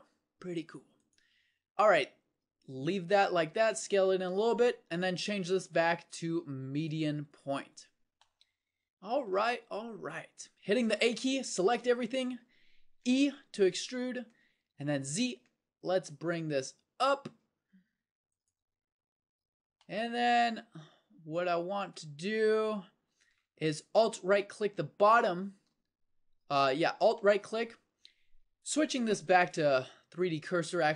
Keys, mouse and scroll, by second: 10.8 a, 11.0 a, 13.0 e, 19.0 middle click.